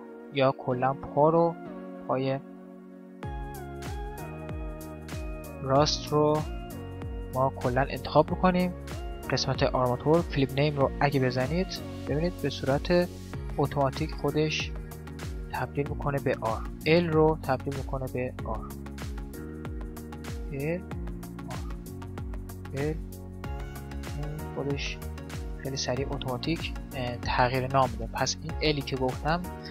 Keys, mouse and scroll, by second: 1.0 middle click, 1.3-3.2 ctrl+drag, 4.5-6.2 right drag, 5.1-6.9 middle drag, 10.9 click, 11.5-13.2 middle drag, 12.5-16.1 right drag, 16.2-18.0 drag, 18.5-19.6 middle drag, 19.6 click, 19.6-24.9 right drag, 23.6-24.9 drag, 25.3 middle click, 25.7-28.1 middle drag, 28.3-29.7 drag.